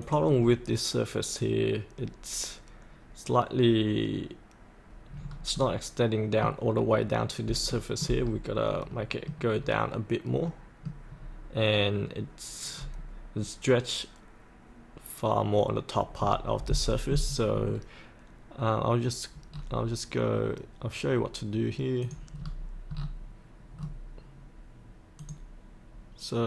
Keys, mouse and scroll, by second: 0.0 click, 0.4-2.4 scroll up 1, 5.1-5.5 scroll down 1, 5.5-7.2 middle drag, 7.7 shift+middle click, 8.4-8.9 scroll up 1, 8.9 middle click, 9.6-10.5 scroll up 1, 10.5 middle click, 11.1-12.7 scroll down 1, 12.7 scroll up 1, 16.2-17.6 scroll down 1, 22.0 click, 22.4-22.8 scroll up 1, 23.0-23.8 scroll down 1, 25.2 click.